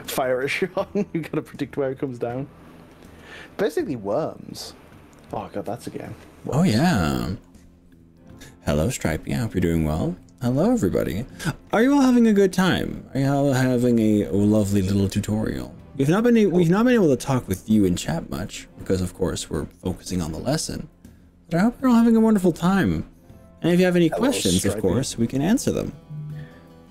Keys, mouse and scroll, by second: 1.3 click, 2.1 click, 2.3 g, 4.4 click, 4.9 click, 5.5-7.5 middle drag, 6.6 click, 10.3-12.2 middle drag, 13.1-18.1 middle drag, 19.1-25.0 middle drag, 25.0-26.9 drag.